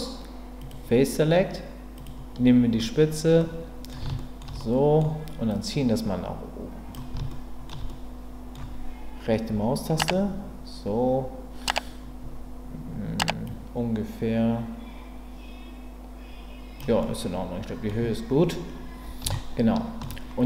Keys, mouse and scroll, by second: 0.6 click, 3.4 middle click, 4.1 shift+middle click, 4.6 middle click, 5.5-6.9 drag, 7.3 shift+middle click, 7.8 middle click, 9.5 KP_3, 13.5-16.8 drag, 17.0-17.8 scroll up 1, 17.8 middle click, 19.3-20.0 shift+scroll up 1, 20.0 shift+scroll down 1.